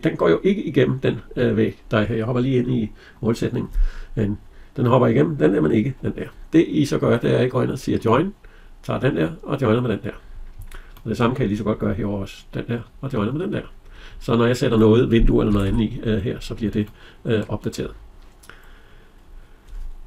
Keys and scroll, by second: 15.3 Escape.